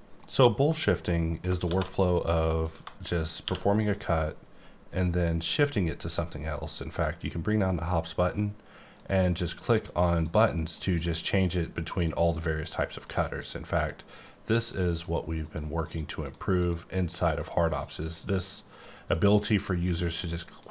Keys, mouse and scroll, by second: 1.1 middle click, 1.6 shift+d, 2.6 click, 3.4 q, 3.7 click, 6.8 click, 8.9 click, 9.3 click, 9.7 click, 10.2 click, 10.6 click, 11.0 click, 11.3 click, 11.9 click, 12.6 click, 13.0 click, 13.4 click, 13.7 click, 14.1 click, 14.6 click, 15.0 click, 15.4 click, 15.8 click, 16.6 click, 16.9 click, 17.3 click, 17.7 click, 18.0 click, 18.3 click, 18.7 click, 19.1 click, 19.5 click, 20.2 click, 20.5 click.